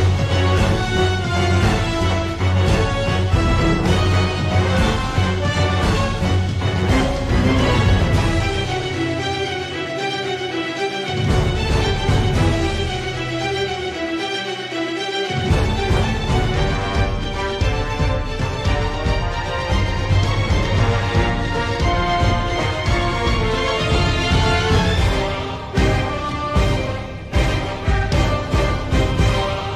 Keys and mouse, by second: 3.9 t, 5.4 ctrl+r, 13.6 3, 14.1 middle click, 15.9 click, 17.1 KP_7, 19.6 e, 23.5 g.